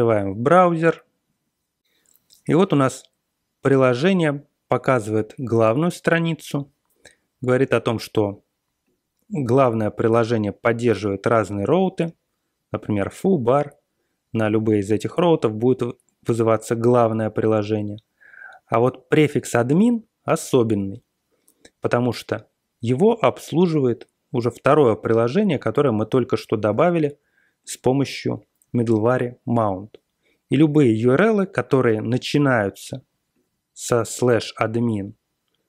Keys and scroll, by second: 0.6 super+Tab, 25.1-26.1 typing, 26.4 Return, 28.4 typing.